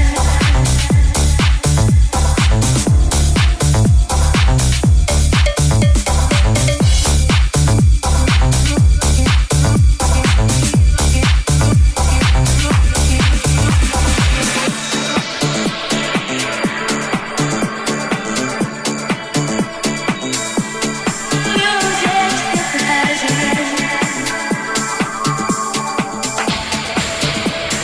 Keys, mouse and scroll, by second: 4.5-16.8 middle drag, 11.6 i, 16.8-27.8 middle drag, 17.6 right click, 21.1 g, 22.6 Tab, 26.0 Tab, 26.3 s.